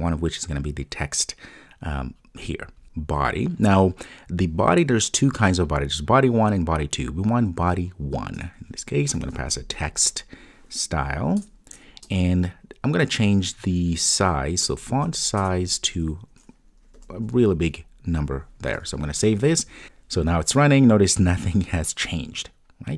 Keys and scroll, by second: 8.4 Return, 11.3 Return, 14.6 Return, 18.8 super+s.